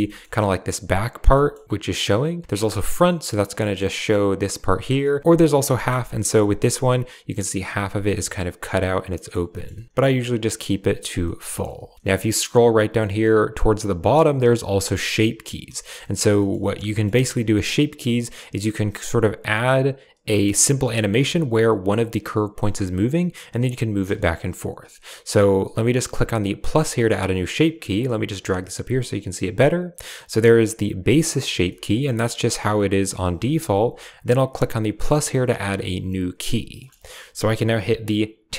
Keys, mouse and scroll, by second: 0.0 middle drag, 1.2 shift+middle drag, 2.0-2.5 drag, 3.5 click, 5.3 drag, 5.7 shift+drag, 6.0 drag, 8.0-9.2 drag, 9.4 click, 9.6 shift+click, 10.0-10.8 drag, 11.1 click, 11.4 shift+click, 11.6-11.9 shift+drag, 15.7 shift+click, 15.9 drag, 16.3 click, 16.5 shift+drag, 16.8 drag, 17.1 shift+click, 21.2 Tab, 22.5 Tab, 24.1 shift+click, 27.9-28.9 drag, 31.6 shift+click, 32.4-33.0 shift+middle drag, 33.3 shift+middle drag, 35.2 typing, 36.8 click, 38.5 Tab.